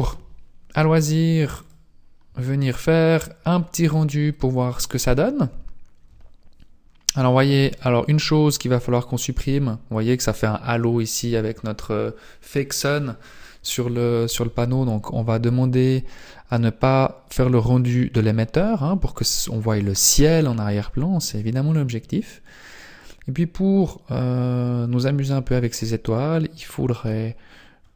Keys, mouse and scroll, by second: 1.1 click, 2.5-3.1 scroll up 3, 4.0 scroll up 1, 7.6 right click, 17.7 click.